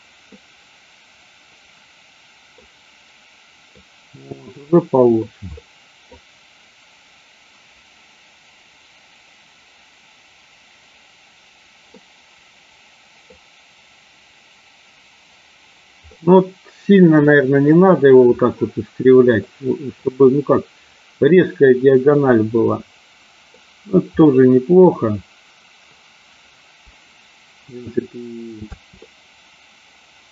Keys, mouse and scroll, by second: 0.4-2.6 middle drag, 3.7-5.4 middle drag, 5.7 middle click, 12.0-13.5 middle drag, 16.2-17.7 middle drag, 19.5 middle click, 22.7 middle click, 24.4 middle click, 28.8 space, 29.2-30.3 middle drag.